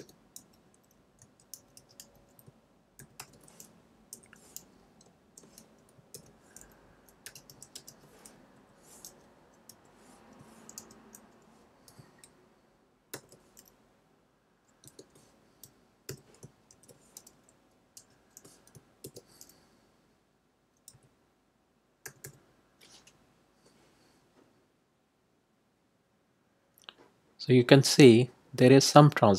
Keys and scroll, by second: 0.3-3.6 typing, 4.1 Left, 6.1-8.3 typing, 8.4 Right, 9.6 ,, 10.7 d, 13.1 shift+=, 14.8 BackSpace, 16.0 =, 18.0 d, 19.0 shift+=, 20.9 2, 22.0 0.